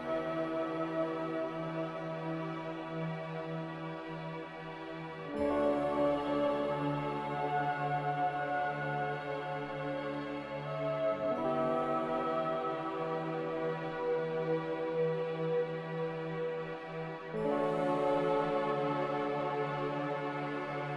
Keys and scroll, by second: 18.2 a, 20.5 b.